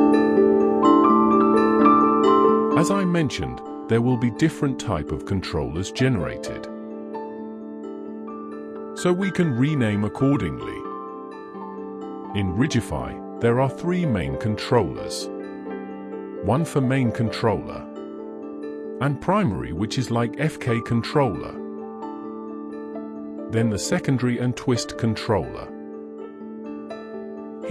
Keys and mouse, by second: 1.2 click, 1.4-5.9 drag, 7.5 click, 7.7-11.6 drag.